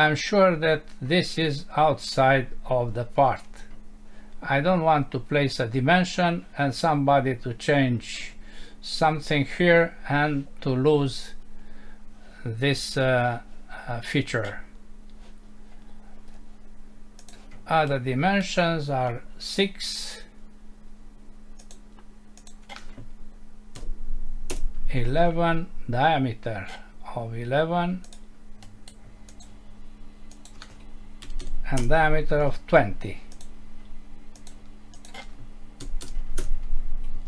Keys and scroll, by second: 24.5 Return, 31.8 Return, 36.4 Return.